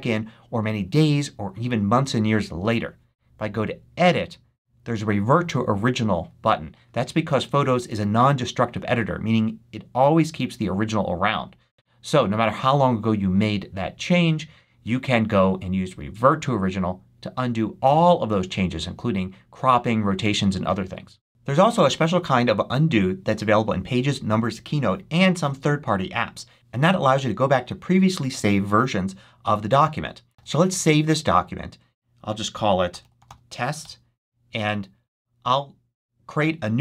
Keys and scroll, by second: 30.3 super+s, 32.5-33.5 typing, 33.7 Return.